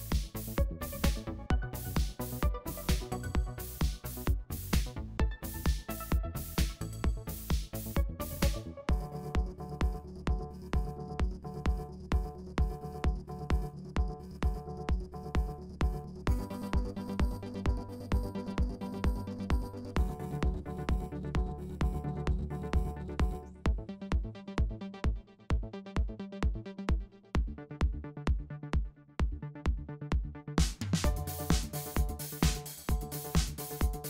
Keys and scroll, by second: 0.1 w, 0.2 Return, 1.2 shift+Page_Up, 2.5 v, 3.4 super+y, 4.1 super+y, 5.0 super+y, 5.9 super+y, 8.1 super+0, 12.8 w, 12.9 Return, 13.3 Up, 13.3 Up, 13.5 Down, 13.6 Up, 13.6 Down, 14.4-16.6 typing, 14.8 Return, 15.4 Up, 15.4 Up, 16.8 shift+Up, 17.0 shift+Up, 17.3 shift+Down, 17.8-21.3 typing, 18.4 Return, 18.8 Page_Up, 18.8 Page_Up, 18.9 Up, 18.9 Up, 19.1 Down, 21.4 Return, 22.1 shift+Up, 22.2 shift+Up, 22.3 shift+Up, 22.5 shift+Down, 22.7 shift+Down, 23.3-26.0 typing, 24.9 shift+Down, 25.0 shift+Up, 25.1 shift+Up, 25.2 shift+Down, 26.0 Return, 26.5 shift+Up, 26.7 shift+Down, 26.9 shift+Down, 26.9 Page_Up, 27.2 Page_Up, 27.3 Page_Up, 27.4 Page_Up, 27.5 Page_Up, 28.8-29.8 typing, 32.0-34.0 typing, 33.1 Tab, 33.2 shift+Page_Down, 33.6 Left, 33.7 Left, 33.7 Left, 33.7 Left.